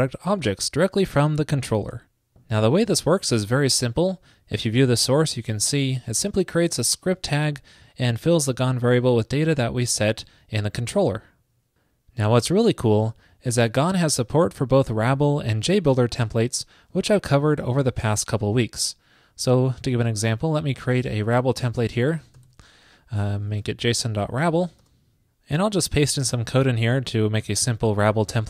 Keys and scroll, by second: 0.0 super+r, 3.2 alt+super+u, 21.8 super+a, 26.5 super+v, 27.5 super+s.